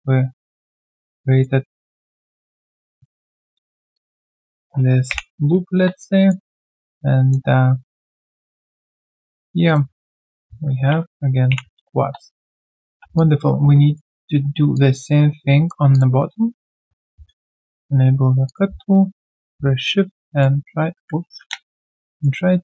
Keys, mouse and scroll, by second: 1.1 alt+click, 1.6 alt+right click, 1.9 alt+click, 2.2 alt+right click, 2.7 right click, 2.7 q, 3.9 shift+click, 5.1 ctrl+Delete, 6.2 alt+right click, 6.4 alt+click, 7.5 right click, 9.2 shift+click, 11.5 ctrl+Delete, 12.5 right click, 13.0 q, 13.1 alt+click, 14.7 alt+click, 15.1 right click, 17.1 ctrl+shift+x, 18.4 shift+click, 20.3 shift+click, 21.2 ctrl+z, 22.1 shift+click.